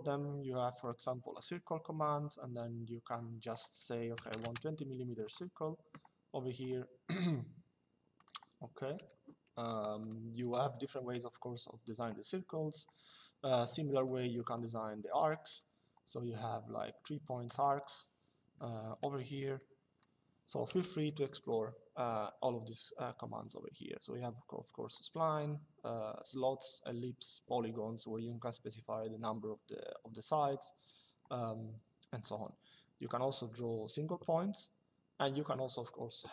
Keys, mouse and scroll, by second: 0.5 click, 3.9 KP_2, 4.1 Return, 5.0 click, 6.3 click, 9.7 click, 13.7 click, 17.2 click, 18.6 Escape, 19.3 click, 20.4 Delete, 21.1 click.